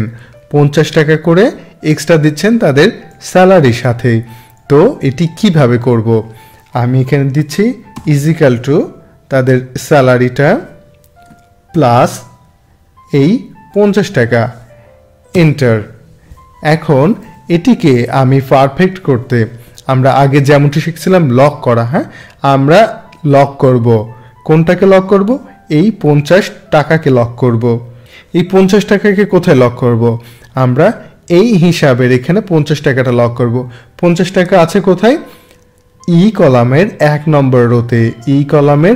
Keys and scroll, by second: 7.9 =, 11.7 shift+=, 15.3 Return.